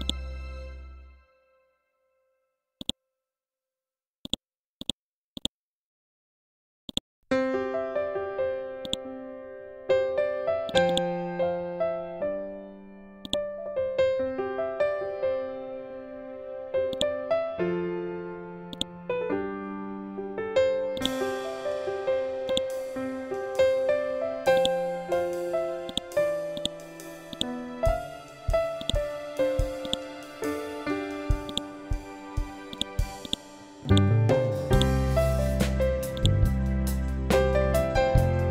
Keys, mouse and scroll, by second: 0.8 scroll up 1, 2.7 click, 13.2 click, 14.7-15.0 typing, 15.7 shift+Tab, 16.8 click, 17.4 scroll down 1, 18.0-18.6 scroll up 1, 18.6-20.9 drag, 20.9 right click, 22.4 click, 25.2 ctrl+z, 25.8 click, 27.2 right click, 28.2 scroll down 1, 28.7 click, 30.2 scroll up 1, 31.4 right click, 32.6-38.5 drag.